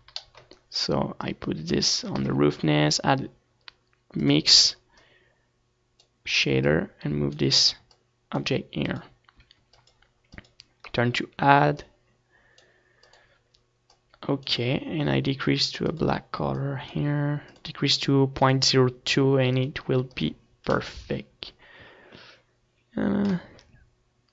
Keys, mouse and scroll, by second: 0.0-15.1 drag, 16.9-21.6 drag, 22.8-24.3 middle drag.